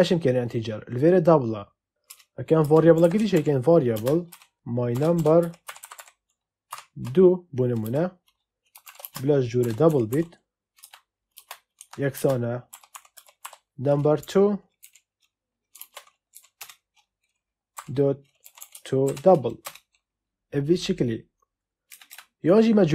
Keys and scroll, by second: 2.0 Return, 2.9-6.6 typing, 7.8-13.8 typing, 10.7 Return, 14.1 Right, 14.7 Left, 15.7 ctrl+space, 16.2 Down, 16.5 Return, 17.7-19.5 typing, 19.5 Return, 21.8 Return.